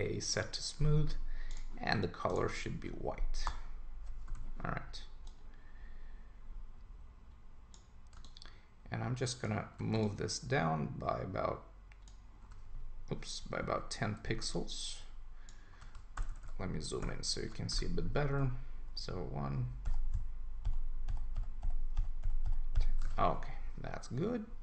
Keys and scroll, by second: 3.5 Return, 13.6 Up, 16.2 super+=, 17.0 super+-, 18.3 Down, 23.0 super+s.